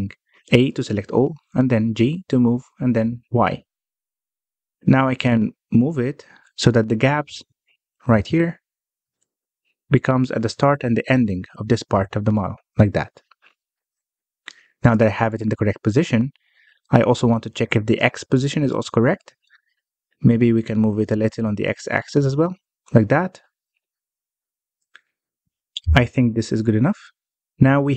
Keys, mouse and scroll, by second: 0.6 g, 5.7 middle click, 6.3 Tab, 6.7 Tab, 7.5-8.1 scroll down 1, 8.1-8.5 scroll up 1, 8.5 shift+middle click, 8.7-9.1 scroll up 1, 9.1 scroll down 1, 9.3 shift+middle click, 9.6 scroll up 1, 10.1 scroll down 1, 10.3-10.9 shift+middle drag, 10.9 g, 13.8 Tab, 16.0 Tab, 16.8-17.2 scroll down 1, 17.2 middle click, 17.9-18.3 scroll down 1, 18.3-20.5 middle drag, 20.5 g, 24.4 middle click, 25.1 Tab, 25.6-27.4 middle drag, 27.4 scroll down 1, 27.6-27.9 shift+middle drag.